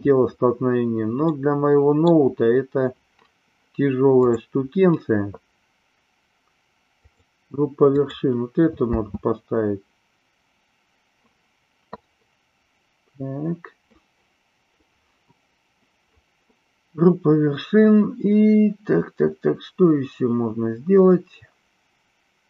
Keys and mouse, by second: 1.2-2.2 middle drag, 4.2 click, 6.9-8.1 drag, 8.8 space.